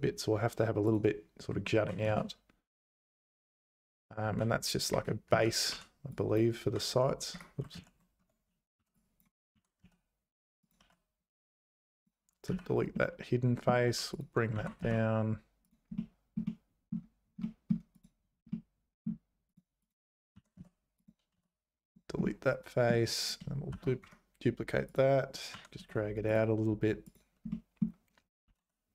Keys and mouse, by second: 1.8 g, 4.3 g, 5.3 z, 5.7 1, 6.1 click, 6.7 g, 7.7 ctrl+z, 8.2 Tab, 8.8 1, 9.0 click, 9.5 g, 11.2 x, 12.5 z, 12.9 middle click, 13.9 3, 14.5 g, 15.9 click, 16.5 click, 17.6 click, 18.5 middle click, 19.5 click, 19.8 click, 20.3 g, 21.3 x, 22.2 middle click, 23.7 shift+d, 24.9 click, 25.5 g, 27.6 middle click, 28.4 s.